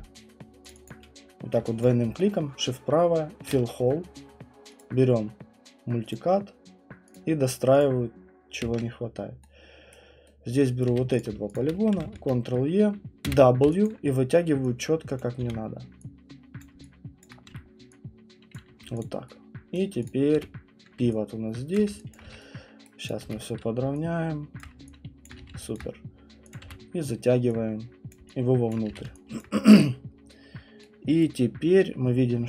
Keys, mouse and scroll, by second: 0.7 click, 0.9 click, 0.9 alt+click, 1.8 click, 3.5 shift+right click, 4.8 click, 6.1 click, 7.1 click, 7.8 click, 8.6 Return, 9.9 right click, 10.8 right click, 10.9 q, 11.2 click, 11.7 middle click, 12.0 middle click, 12.1 ctrl+e, 13.3 w, 13.8 alt+click, 15.2 click, 15.4 r, 16.5 scroll, 16.6 middle click, 16.6 click, 17.3 alt+click, 17.5 w, 18.5 click, 18.7 q, 19.0 click, 19.7 right click, 20.1 click, 20.3-25.4 typing, 21.8 click, 22.1 click, 22.9 right click, 23.1 click, 24.6 click, 25.2 alt+click, 26.5 click, 26.6 w, 28.1 click, 28.9 q, 29.4 click, 31.2 right click.